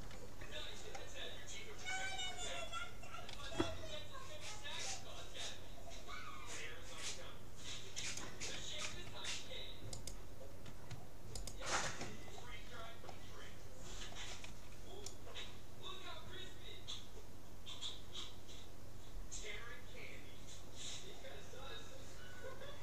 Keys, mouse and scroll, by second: 3.3 g, 8.9 a, 10.1-13.1 right drag, 13.1-16.1 middle drag, 14.5 c.